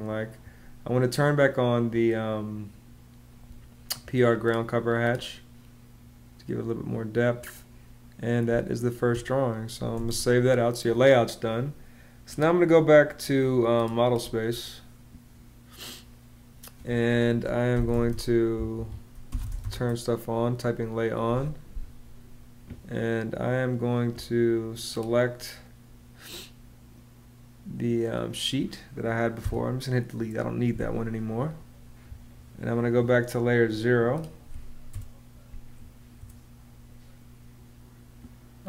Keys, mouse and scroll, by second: 8.2 space, 9.7 super+s, 17.3-19.9 typing, 18.5 Escape, 29.2 BackSpace, 34.7 0, 35.9 0.